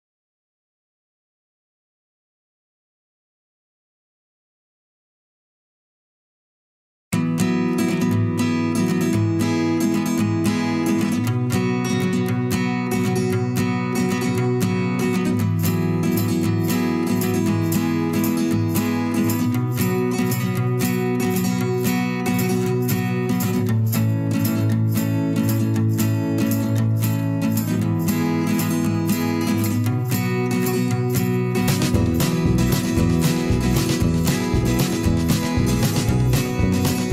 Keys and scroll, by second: 21.2 z.